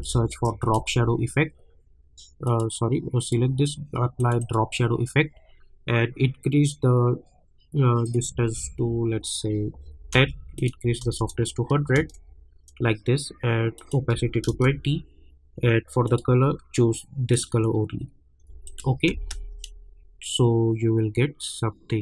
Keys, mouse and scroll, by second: 0.0-0.5 typing, 0.7 right click, 2.4 click, 8.0 click, 11.9 Return, 13.7 click, 14.4 Return, 16.0 click, 19.1 space.